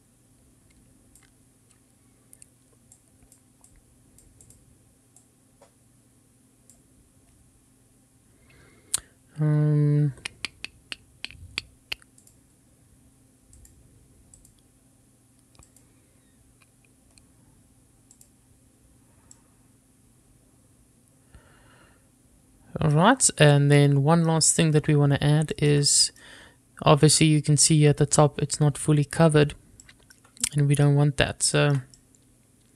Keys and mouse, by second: 3.3-4.7 drag, 5.6-7.0 drag, 12.5 click, 13.8 click, 14.6 click, 15.9 click, 18.4 click, 19.5-24.0 middle drag, 24.1-24.4 middle drag, 25.7 shift+middle click, 26.1 middle click, 30.0-30.6 shift+middle drag, 31.0 middle click, 31.8 shift+middle click.